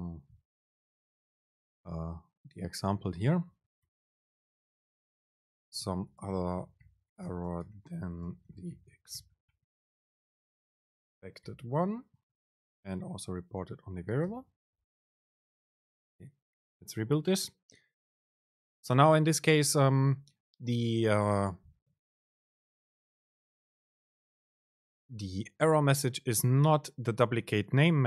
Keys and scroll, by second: 10.4 BackSpace, 13.1 super+space, 18.4 ctrl+shift+super+F9.